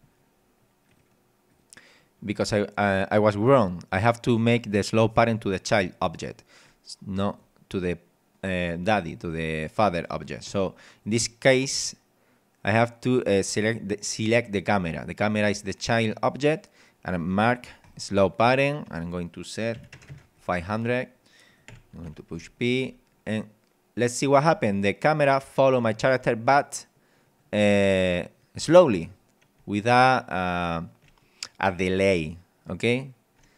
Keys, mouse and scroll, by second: 0.9 click, 1.5 click, 7.3 click, 10.4 right click, 17.4 click, 18.8 click, 19.8 KP_5, 20.0 KP_0, 20.4 click, 21.5 click, 21.7 p, 22.3 w, 24.5 w, 26.5 d, 27.7 w, 29.7 d, 32.2 d.